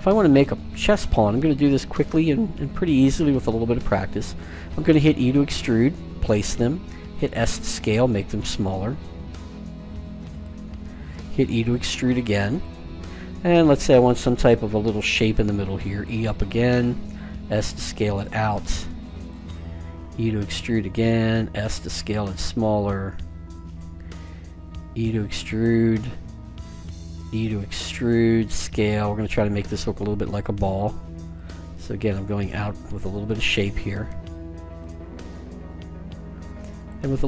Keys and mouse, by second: 4.8 e, 6.9 s, 11.2 e, 15.8 e, 17.1 s, 20.1 e, 21.5 s, 24.3 e, 27.0 e, 28.1 s, 30.3 e, 31.4 s, 34.0 e, 34.8 s.